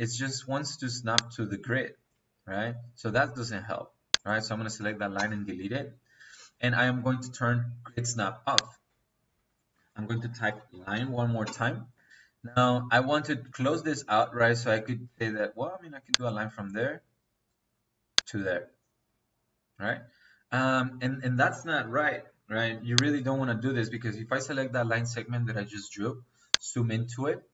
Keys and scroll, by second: 5.0 Delete, 9.2 Escape, 10.5-11.3 typing.